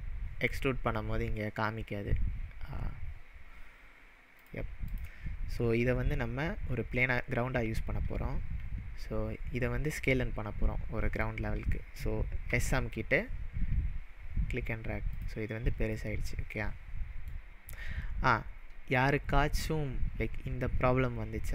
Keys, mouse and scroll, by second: 4.4 drag, 4.9 click, 12.5 s, 15.1 click, 16.0-17.4 middle drag, 21.3-21.5 scroll up 6.